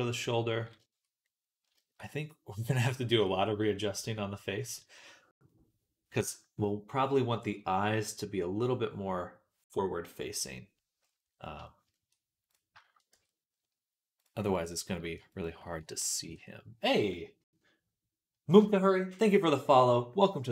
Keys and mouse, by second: 1.2-2.2 middle drag, 10.5 middle click, 11.0-12.3 middle drag, 12.3-14.7 shift+right drag, 12.6 shift+middle click, 13.0 Tab, 14.0 click, 14.0 middle click, 15.2 shift+click, 15.2 shift+right click, 16.1 ctrl+KP_Add.